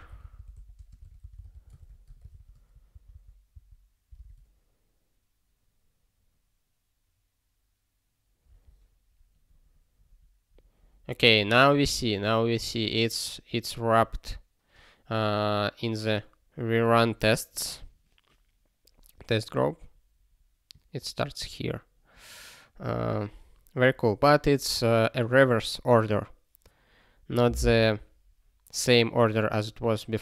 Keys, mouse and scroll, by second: 0.7 space, 1.0 r, 2.3 ctrl+s, 2.9 ctrl+n, 3.1 ctrl+n, 4.3 ctrl+k.